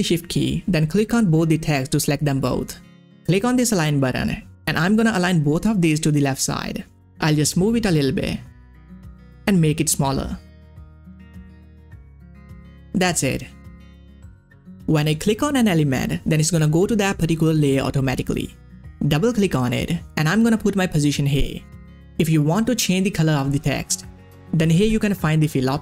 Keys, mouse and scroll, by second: 0.3 click, 1.8 shift+click, 3.8 shift+click, 5.0 click, 5.0-13.8 drag, 14.4 scroll down 1, 15.2 click, 19.2 click, 19.9-22.2 typing, 22.4 click, 23.2 click, 25.3 click.